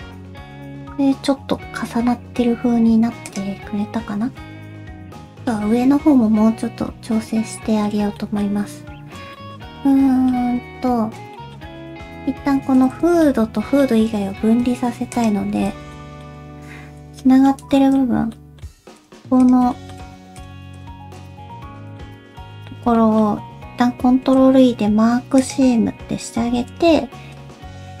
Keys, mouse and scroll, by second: 4.3-4.8 scroll down 1, 4.3 q, 5.1 shift+middle click, 5.5 middle click, 8.2 middle click, 8.9 scroll up 1, 9.3 shift+middle click, 9.9 middle click, 10.4 Tab, 11.4 shift+middle click, 11.6 scroll up 1, 11.8-12.3 scroll down 1, 12.6 alt+z, 13.0 alt+z, 13.2 Tab, 13.2 middle click, 13.9-14.5 scroll up 3, 14.9 alt+z, 15.1 alt+click, 15.9 middle click, 15.9 middle click, 17.0 /, 17.2 middle click, 17.8 shift+middle click, 18.0 alt+click, 18.0-18.4 scroll up 2, 18.4 middle click, 19.0 shift+click, 19.4 shift+click, 19.6 scroll up 1, 19.7 middle click, 20.4 shift+click, 20.8 shift+click, 21.2 shift+click, 21.5 shift+click, 21.5 middle click, 22.2 alt+z, 22.7 alt+z, 23.0 middle click, 24.1 ctrl+e, 26.1 alt+a, 26.5 3, 27.4 l.